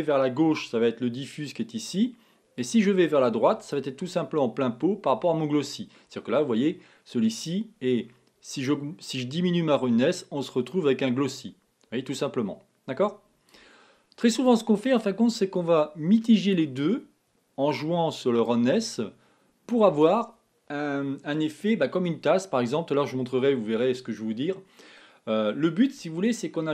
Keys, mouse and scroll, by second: 2.9-4.2 drag, 8.1-12.5 drag, 14.7-18.1 drag, 18.7 click.